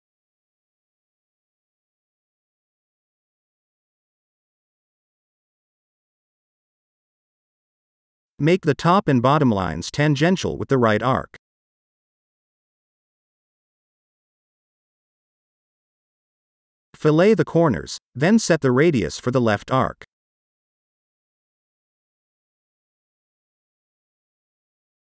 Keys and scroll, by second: 6.8 Delete, 9.7 t, 10.3 Return, 12.3 t, 13.1 Return, 24.3-25.2 typing.